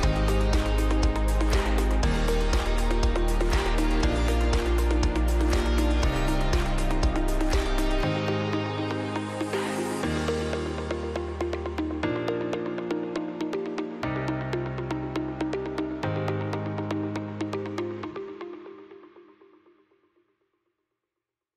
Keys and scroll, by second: 0.0-0.7 typing, 1.0 Escape, 11.8 space, 12.3 F3, 17.0 shift+F2, 18.1 Escape, 19.6 shift+F2, 20.6 F9.